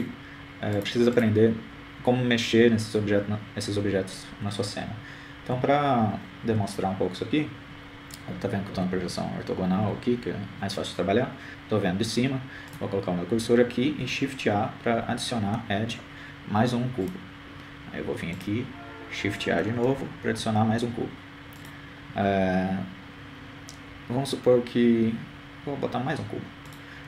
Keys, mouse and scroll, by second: 0.0 click, 1.8-4.5 drag, 6.6 KP_1, 7.6 KP_3, 8.5 KP_7, 10.4 KP_5, 10.9 KP_5, 11.1 KP_5, 12.1 KP_5, 14.9-16.3 drag, 17.3 shift+a, 20.8-22.2 drag, 22.7 shift+a.